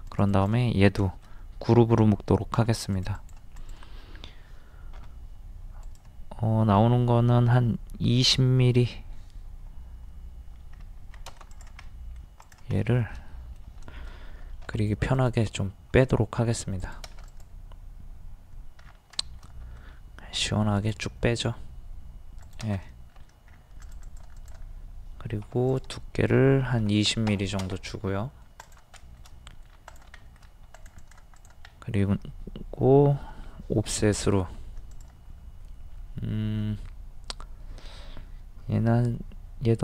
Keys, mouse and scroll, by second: 0.1 click, 1.0-2.1 shift+middle drag, 2.5 g, 2.9 click, 5.0 d, 5.8 click, 11.0 Escape, 11.5 click, 11.9 middle click, 12.4 click, 14.7 shift+m, 15.2 click, 18.8-19.2 scroll down 1, 19.3 shift+middle click, 20.4 typing, 20.7 click, 22.8 middle click, 23.5 scroll up 1, 23.8 click, 25.5 d, 25.7 click, 26.8 KP_2, 26.9 KP_0, 28.1 middle click, 28.7 click, 29.0 shift+middle click, 29.9 click, 30.2 shift+middle click, 30.8 click, 31.7 middle click, 33.9 o, 35.0 click.